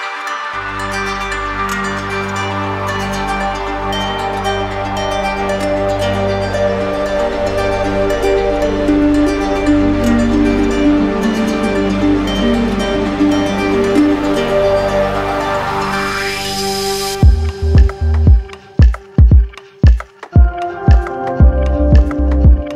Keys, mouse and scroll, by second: 0.8 click, 1.8 click, 3.8 z, 5.4 click, 6.9 right click, 8.3 alt+right click, 14.8 click, 16.9 click.